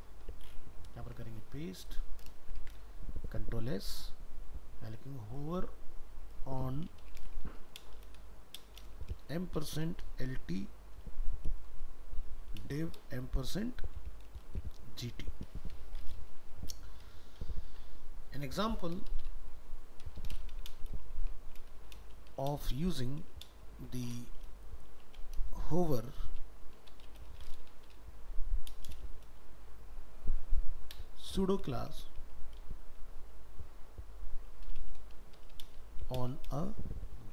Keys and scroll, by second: 1.0 ctrl+v.